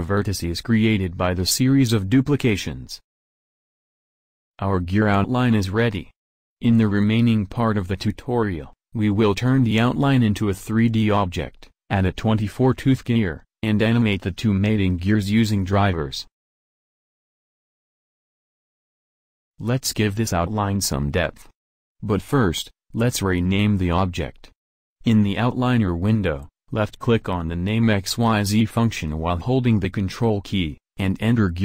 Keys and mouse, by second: 30.7-31.6 drag.